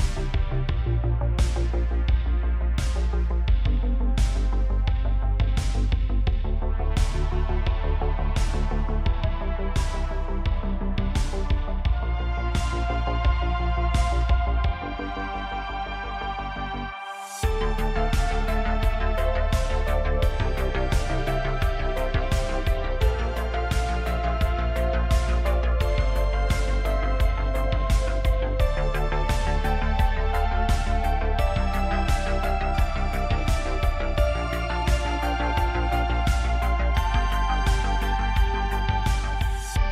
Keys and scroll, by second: 27.2 Tab, 28.4 1, 30.2 ctrl+KP_Add, 30.4 ctrl+KP_Add, 30.5 ctrl+KP_Add, 30.6 ctrl+KP_Add, 30.9 ctrl+KP_Add, 31.4 ctrl+KP_Add, 36.5 Tab, 38.2 Tab.